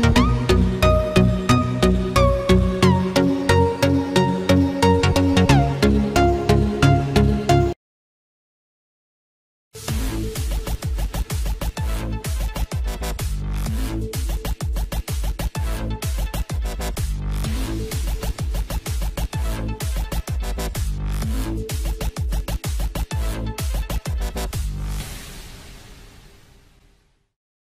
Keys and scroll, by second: 0.4 ctrl+space, 1.0 ctrl+=, 1.6 ctrl+-, 2.2 ctrl+=, 2.6 ctrl+-, 6.3 F6.